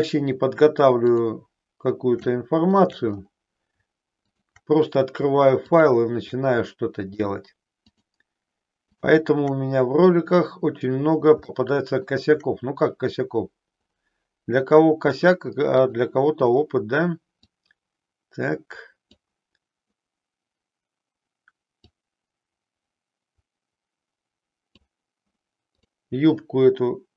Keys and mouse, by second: 1.1 shift+click, 2.3 shift+middle click, 4.4 shift+click, 7.1 shift+click, 8.1 shift+click, 9.1 shift+click, 11.6 shift+middle click, 15.8 click, 17.3-19.1 drag, 21.8-25.0 drag, 25.8 click.